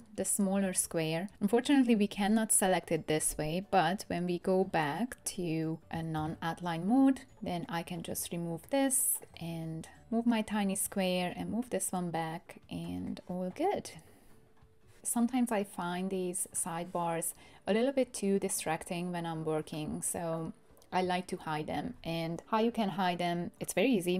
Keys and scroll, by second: 6.2 super+y.